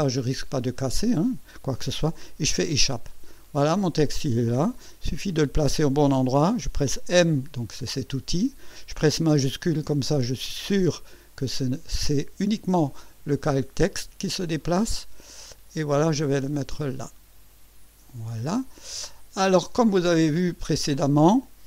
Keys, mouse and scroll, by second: 2.6 Escape, 7.1 m, 14.6-18.2 shift+drag.